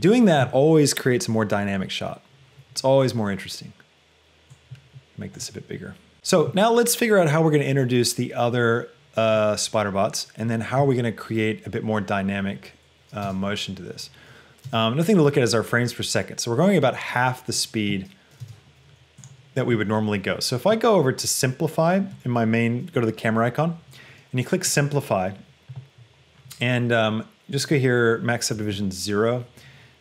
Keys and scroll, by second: 14.7 space, 18.7 space, 28.6 KP_0, 29.0 Return.